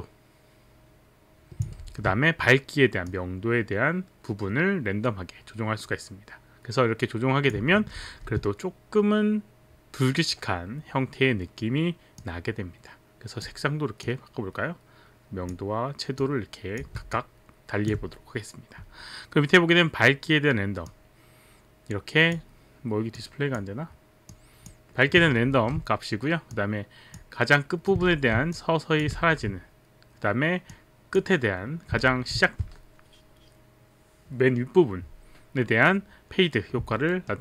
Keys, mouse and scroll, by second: 1.8 ctrl+z, 3.0 click, 7.9 ctrl+z, 12.2 click, 14.1 click, 16.2 click, 17.3 alt+click, 20.9 click, 23.2 click, 24.2 click, 25.8 ctrl+z, 26.5 click, 28.1 ctrl+z, 28.5 click, 28.7 ctrl+z, 28.7 click, 29.2 ctrl+z, 30.7 click, 32.0 ctrl+z, 37.0 alt+middle click.